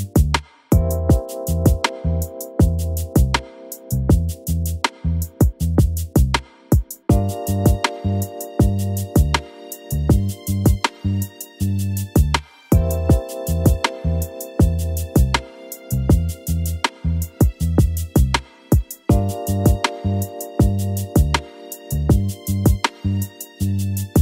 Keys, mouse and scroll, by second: 0.0 KP_7, 0.3-1.6 scroll up 9, 1.6 e, 3.1 scroll up 1, 3.9 click, 4.1 scroll up 2, 4.5 e, 5.7 click, 7.3-8.0 scroll down 10, 9.2 p, 10.2 click, 11.5 r, 12.9 KP_1, 13.3-13.8 scroll down 6, 13.8 click, 14.3 click, 15.0 click, 15.8 KP_1, 16.2 click, 16.7-17.3 scroll up 2, 18.5 Tab, 18.9 click, 19.1 click, 19.3 Tab, 20.1 alt+h, 21.9 click, 22.8 l, 23.2 click, 23.5 click, 24.1 click.